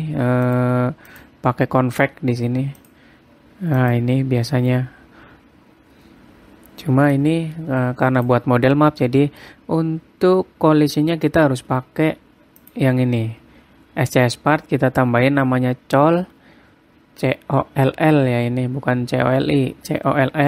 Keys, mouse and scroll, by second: 1.0 click, 1.7 click, 3.4 click, 4.4 click, 7.7 click, 9.5 middle click, 10.1-10.5 scroll up 2, 11.0-11.9 scroll down 1, 11.9-12.5 scroll down 2, 13.2 click, 13.7-14.1 scroll down 1.